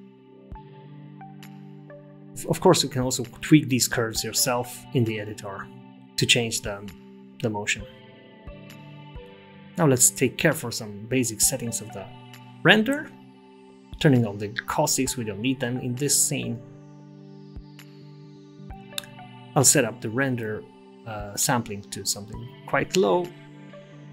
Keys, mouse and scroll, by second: 2.1 space, 2.3 right click, 2.3 t, 4.1 space, 6.9 t, 10.2 click, 10.2 scroll down 4, 11.8 click, 14.6 scroll down 2, 17.7 click, 18.1 click, 18.6 scroll up 7.